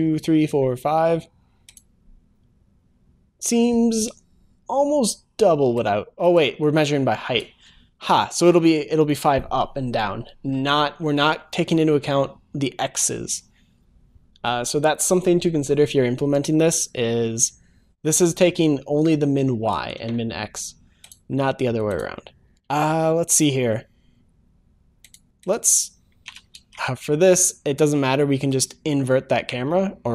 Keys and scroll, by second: 26.6 ctrl+s, 28.6 ctrl+shift+s.